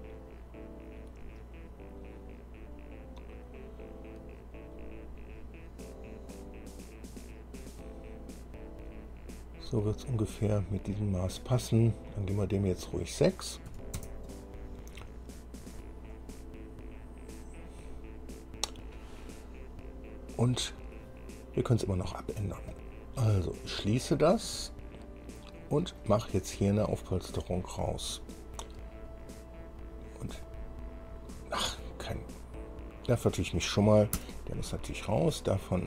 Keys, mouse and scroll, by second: 12.6 click, 13.9 KP_6, 14.2 KP_Enter, 16.3-18.7 drag, 19.3-19.8 scroll down 1, 22.9 click, 24.4-24.8 scroll down 1, 24.9-26.4 drag, 26.6-27.6 middle drag, 28.4 scroll down 2, 29.3 click, 30.6 click, 32.3 scroll down 2, 33.5 click, 34.4 Delete.